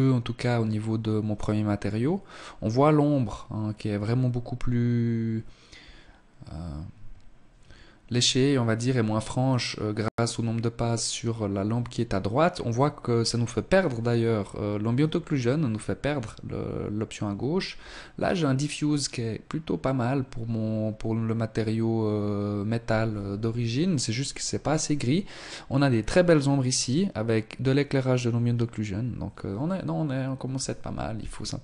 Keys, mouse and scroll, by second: 30.6 Escape, 31.4 right click.